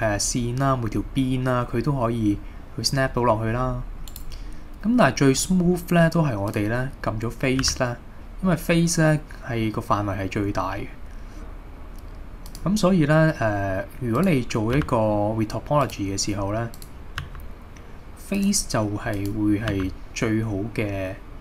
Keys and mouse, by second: 4.1 right click, 5.5-6.9 drag, 7.6 g, 12.5 click, 14.8 g, 15.9 click, 17.3 g, 18.4 click, 19.2 click, 19.8 g.